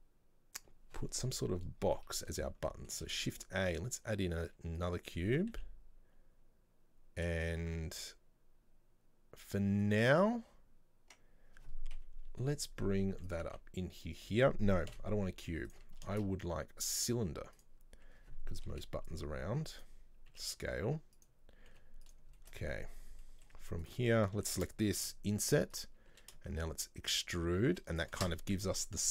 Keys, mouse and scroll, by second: 1.4 scroll down 1, 2.1-2.5 middle drag, 2.5 scroll down 1, 2.8 middle click, 3.2 shift+a, 5.3 scroll down 2, 5.4 Tab, 12.1 KP_3, 13.1 g, 15.0 Delete, 16.3 shift+a, 18.9 r, 22.5 shift+middle click, 22.8 scroll up 1, 23.4 middle click, 24.0 right click, 24.6 shift+middle click, 25.2 i.